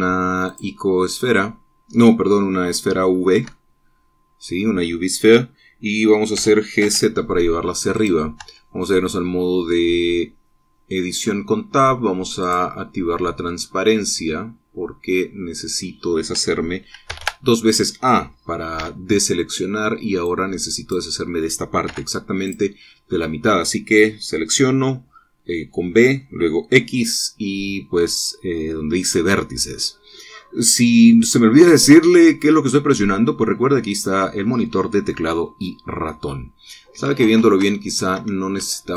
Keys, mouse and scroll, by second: 1.0 click, 2.4-3.0 scroll up 1, 3.0-3.4 scroll down 1, 3.6-5.3 shift+drag, 6.9 g, 7.3 z, 8.4 click, 9.0 Tab, 9.3-11.7 drag, 12.9 click, 14.0-16.5 drag, 17.6 a, 19.3 b, 20.8 click, 22.4 x, 23.0 click, 37.8 ctrl+z.